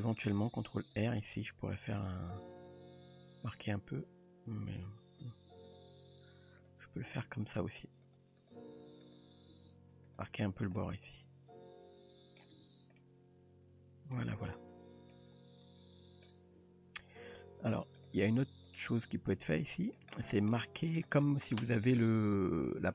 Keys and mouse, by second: 0.6 ctrl+r, 4.7 ctrl+z, 5.7 click, 7.1 g, 8.5 click, 9.0 click, 9.5 g, 10.8-12.4 middle drag, 12.6 Tab, 13.0-14.2 middle drag, 15.1-16.3 middle drag, 16.6 Tab, 18.0 click, 19.3-20.0 middle drag, 20.2 shift+middle drag, 20.5-21.0 middle drag.